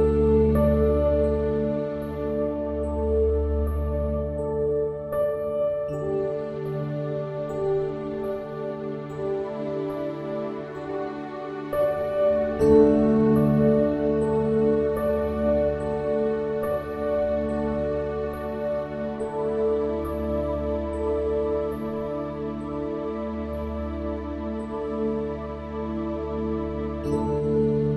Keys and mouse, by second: 19.4 click, 21.6-21.9 drag.